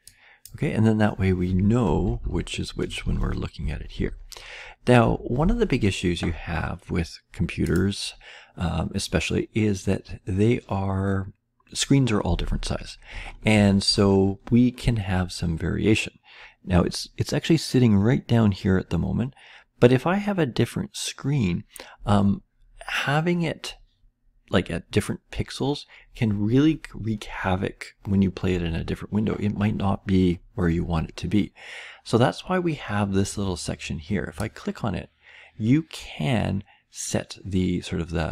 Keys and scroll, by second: 1.8-3.9 typing, 5.0 Delete, 9.9 Delete.